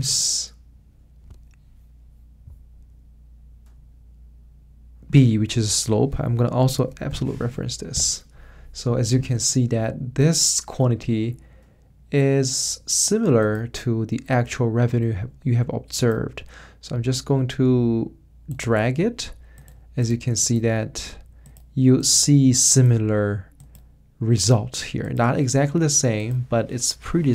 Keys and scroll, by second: 7.1 F4, 7.9 Return.